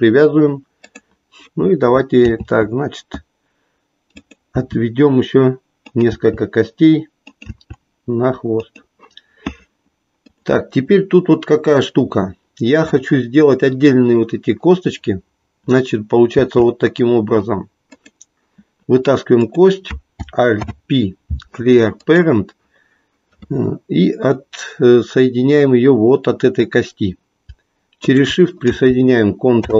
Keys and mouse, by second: 0.8 click, 2.2 e, 4.5 e, 6.0 click, 6.1 e, 7.4-8.8 drag, 8.8 e, 10.1 click, 16.4 e, 19.5 click, 20.6 alt+p, 29.5 ctrl+p.